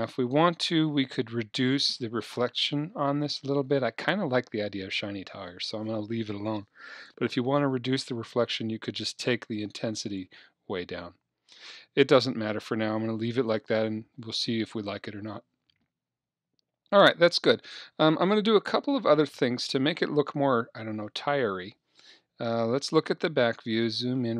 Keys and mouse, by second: 10.2-22.5 drag, 22.5 KP_1, 24.1-24.3 middle drag.